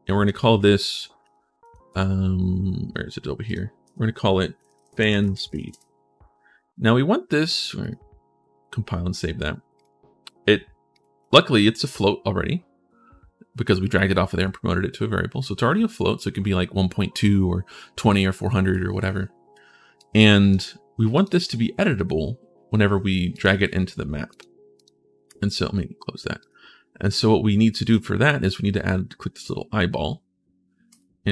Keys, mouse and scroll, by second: 1.4 click, 2.7-3.2 scroll down 1, 3.2 click, 4.3-5.9 typing, 7.2 click, 7.6 click, 9.5 click, 10.7 click, 11.0 click, 19.8 click, 20.9 click, 24.5 click, 25.7 middle click, 26.2 click, 27.6 click, 30.7 click.